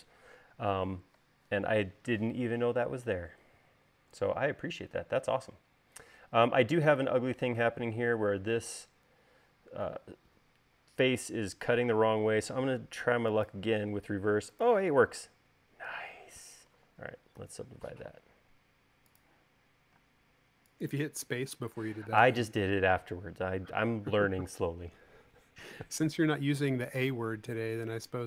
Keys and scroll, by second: 17.9 u, 20.5 space.